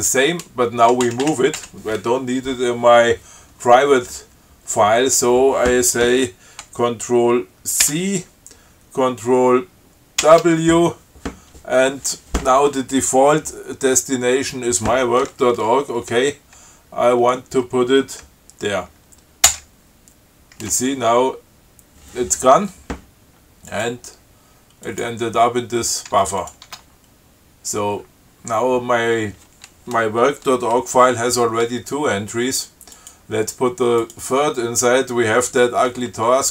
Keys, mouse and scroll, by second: 1.8 Up, 8.1 ctrl+c, 10.5 ctrl+w, 19.7 Return, 24.0 click, 25.1 click, 26.7 click, 26.9 Tab, 33.2 click, 34.2 click.